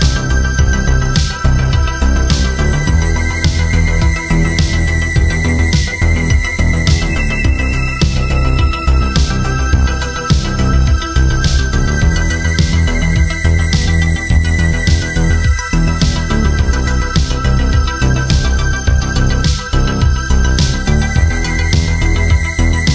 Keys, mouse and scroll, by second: 9.1 Return, 14.0 Return, 15.8 Return, 20.8 Return.